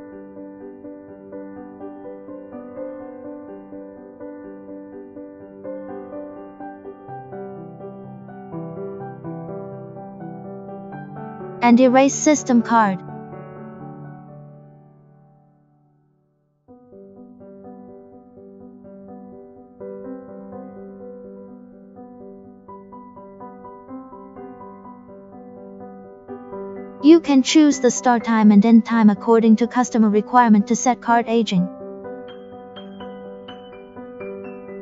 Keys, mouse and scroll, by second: 8.5 click, 10.0 click, 11.5 click, 16.7 click, 18.1 click, 19.8 click, 21.0 click, 23.1 click, 24.0 click, 27.8 click, 29.6 click, 31.3 click, 33.2 click, 34.4 click.